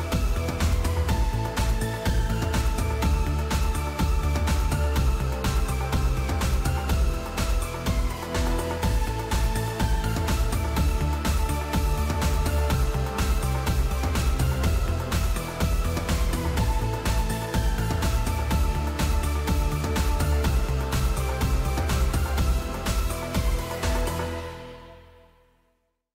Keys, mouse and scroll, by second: 7.3 s, 7.6 Return.